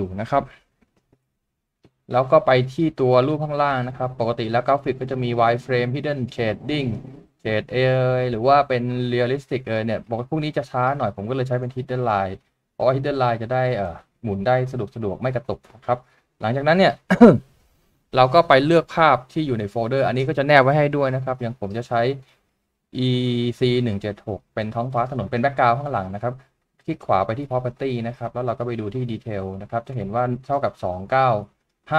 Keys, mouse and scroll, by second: 1.2 middle click, 14.0 shift+middle click, 19.8-21.0 scroll down 1, 26.4 right click.